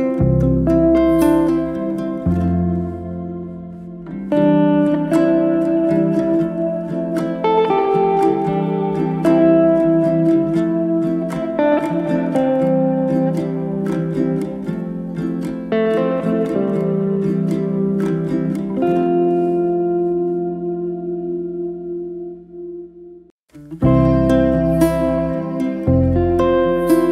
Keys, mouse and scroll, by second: 0.0 drag, 0.7-1.9 drag, 1.9 s, 3.9 middle click, 4.2 Tab, 4.3 middle click, 5.1 f, 5.3 middle click, 6.0 e, 7.0-7.6 middle drag, 7.6 i, 9.0 scroll up 3, 9.2 middle click, 9.7 e, 10.7 scroll down 1, 10.9-12.4 middle drag, 13.0 Tab, 13.1 click, 13.3 Tab, 13.5-13.8 scroll up 2, 13.8-15.8 shift+middle drag, 15.8 1, 15.9-16.7 middle drag, 16.7 click, 17.4 shift+s, 18.3 Tab, 18.5-20.0 middle drag, 20.0 shift+z, 20.9 click, 21.3 scroll up 1, 21.6 shift+middle click, 22.0 scroll up 1, 22.2-22.8 shift+middle drag, 22.8 shift+a, 25.8-27.1 scroll up 1.